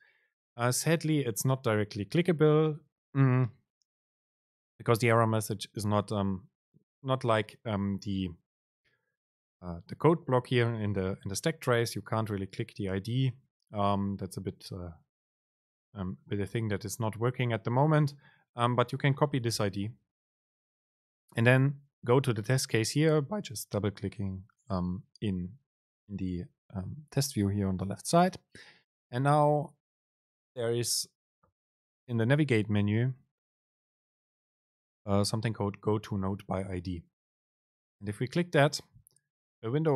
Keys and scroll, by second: 19.8 super+c, 39.0 super+g.